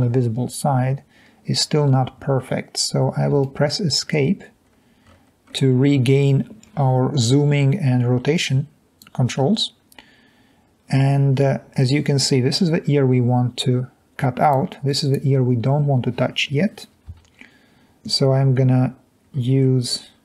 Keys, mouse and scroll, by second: 3.4 Escape, 4.6-5.1 scroll down 3, 14.5-15.1 drag, 17.2 1, 19.2-19.6 scroll up 2, 19.6-20.2 scroll down 2.